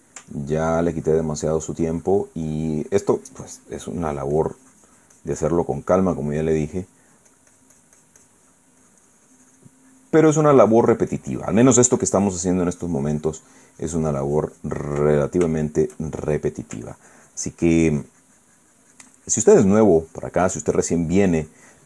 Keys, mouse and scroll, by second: 0.9-9.5 ctrl+drag, 9.5-15.7 ctrl+drag, 15.7-17.5 ctrl+middle drag, 18.5-21.8 ctrl+drag.